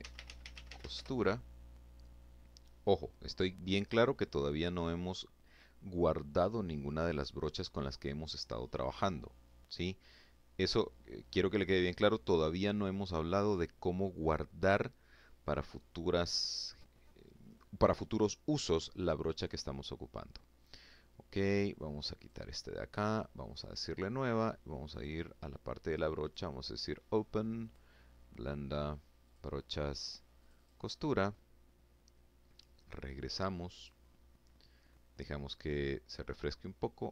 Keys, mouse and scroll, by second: 0.0-0.1 typing, 21.0 click, 22.5 click, 23.7 click, 25.0 click, 26.4 click, 28.1 click, 29.2 click, 32.6 click, 36.8 f.